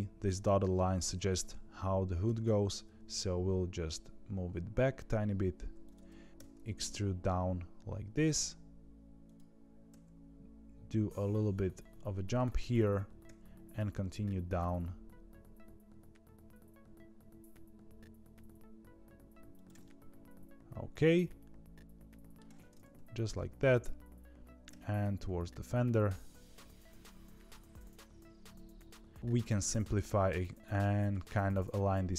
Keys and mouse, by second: 2.2 g, 6.3 e, 9.8 e, 13.2 e, 19.8-22.3 middle drag, 22.9 KP_3, 24.6 e.